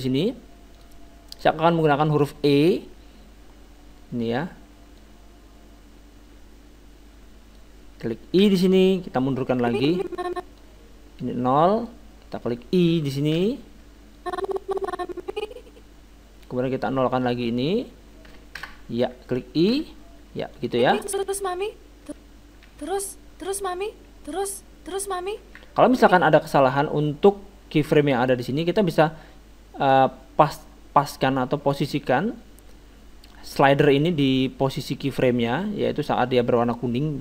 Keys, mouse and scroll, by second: 0.7-2.7 drag, 2.1-4.3 middle drag, 5.0-6.9 drag, 8.4 i, 9.6-13.0 drag, 13.4 i, 14.2-15.9 drag, 17.1-18.8 drag, 19.7 i, 20.6-22.3 drag, 21.2 alt+a, 22.0 alt+a, 22.7 alt+a, 25.9 alt+a, 25.9-27.6 drag, 29.0-30.7 drag, 34.7-36.6 drag.